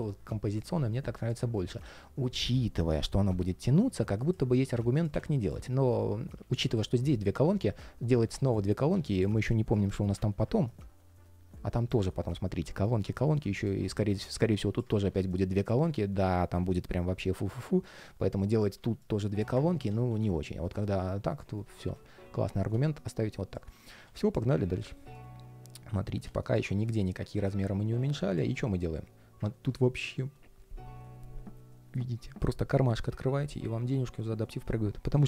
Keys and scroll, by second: 19.4 super+z.